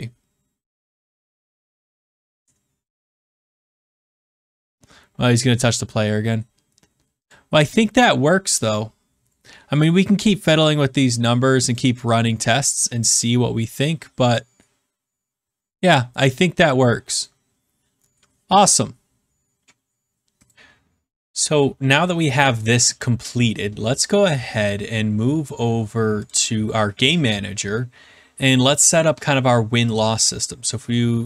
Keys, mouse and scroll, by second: 20.5 click, 24.6 click, 26.2 click, 29.9 click.